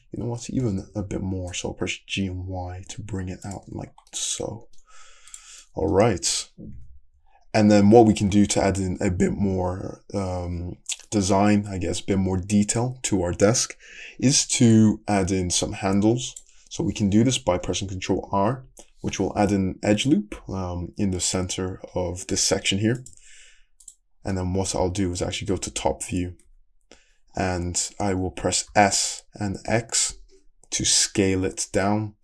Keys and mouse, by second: 0.6 g, 1.9-3.0 shift+middle drag, 3.0-6.8 drag, 3.8 Tab, 6.8-8.4 middle drag, 6.8 `, 7.8 Tab, 10.9-16.4 middle drag, 16.4 click, 18.3 ctrl+r, 21.4-32.2 middle drag, 25.5 Escape, 26.5 `, 28.7 s.